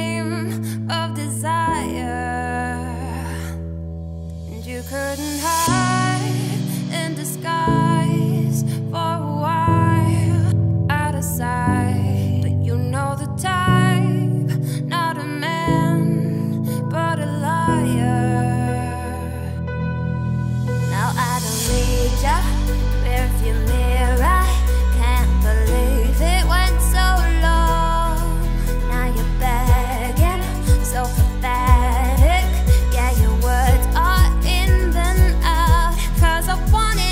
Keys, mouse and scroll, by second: 2.4 click, 3.1 click, 3.7 g, 6.8 z, 7.0 scroll down 3, 7.2 middle click, 7.6-9.0 scroll up 2, 9.0-10.9 middle drag, 10.9 Tab, 11.1 scroll down 3, 11.3 middle click, 11.7-12.1 scroll down 4, 12.1-12.4 middle drag, 12.4-12.9 scroll up 2, 12.9-13.3 middle drag, 13.3-13.6 scroll up 2, 13.6 click, 14.2 shift+click, 14.6 shift+click, 15.0 Tab, 15.2 a, 15.7 scroll down 1, 15.8 middle click, 16.0 scroll up 2, 16.1 s, 18.1 `, 18.4-19.3 scroll up 5, 18.6 z, 19.3 g, 21.9-22.2 scroll up 1, 22.5 z, 22.9 scroll down 4, 23.1 middle click, 23.6 Tab, 24.0 scroll down 2, 24.3 click, 24.6 scroll down 3, 24.7-25.4 middle drag, 25.4 click, 25.9 shift+click, 26.2 Tab, 26.5-28.7 typing, 27.8 click, 30.1 scroll down 2, 30.2 middle click, 30.5 Tab, 30.7 click, 35.7-36.1 scroll up 2, 36.1 middle click, 36.5-37.1 scroll up 2.